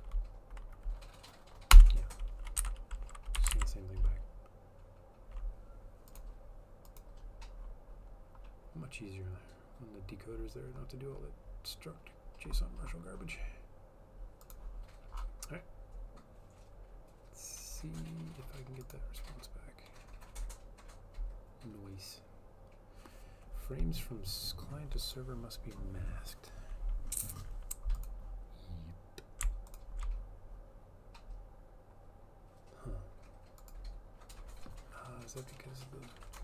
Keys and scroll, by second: 1.9 Return, 2.5-3.5 typing, 3.7 ctrl+s.